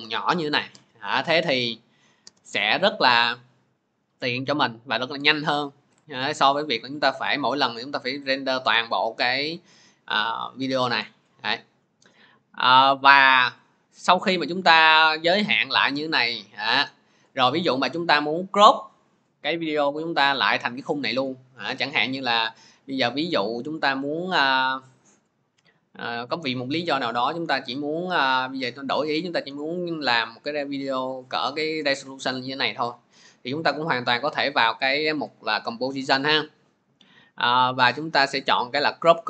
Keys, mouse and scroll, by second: 28.6 click, 30.8 click.